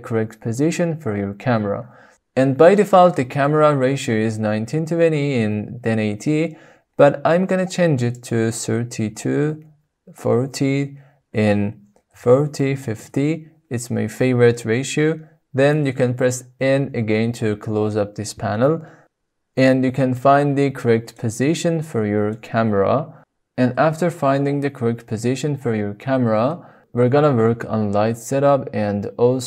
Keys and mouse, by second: 8.2-13.9 drag, 16.5 n, 21.1 shift+middle click, 21.3 shift+click, 21.3-23.2 shift+middle drag, 25.4 shift+click, 25.6-26.5 shift+middle drag, 27.9 shift+middle click, 28.1 shift+click, 28.2 shift+middle click.